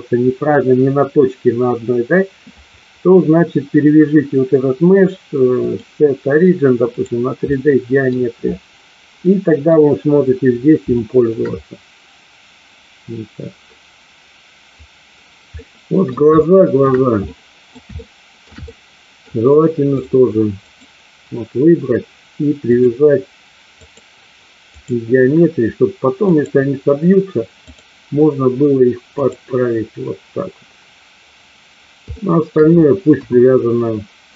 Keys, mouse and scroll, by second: 5.6-7.1 drag, 7.5 middle click, 9.2-9.6 middle drag, 10.8-11.3 shift+middle drag, 15.5-16.1 middle drag, 16.3-16.8 shift+middle drag, 17.2-17.7 middle drag, 17.8-18.5 shift+middle drag, 18.6-19.2 middle drag, 19.8 click, 22.6-24.8 drag, 26.2 click, 27.7-29.3 drag, 32.1-32.5 shift+middle drag, 33.1 KP_1.